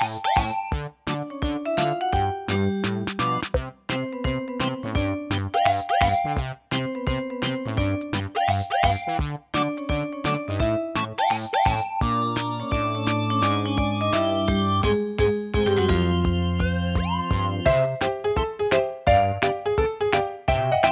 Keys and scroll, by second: 8.0 super+a.